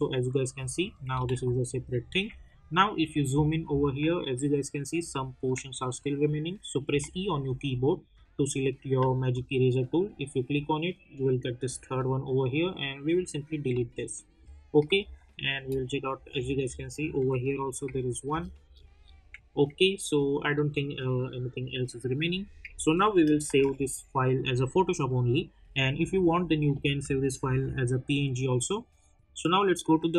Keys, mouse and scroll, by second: 1.2 ctrl+z, 2.9 alt+scroll up 2, 5.0 alt+scroll up 1, 6.8 e, 9.3-12.4 drag, 13.0 click, 13.8 alt+scroll down 1, 14.9 space, 15.1 click, 15.5 space, 16.3 alt+scroll up 1, 17.5 click, 18.0 alt+scroll down 1, 19.9-20.5 alt+scroll up 1, 23.4 ctrl+s, 27.4 v, 29.2 click.